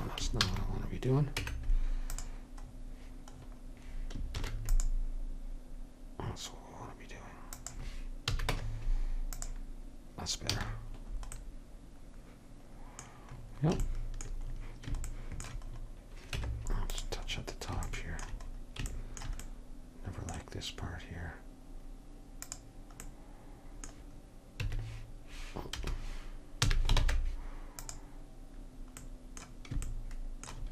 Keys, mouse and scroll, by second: 0.5 ctrl+z, 1.4 Tab, 4.4 ctrl+r, 8.4 a, 8.6 Tab, 10.6 a, 16.5 Tab, 22.5-24.2 drag, 24.7 q, 26.7 a, 27.0 ctrl+Tab.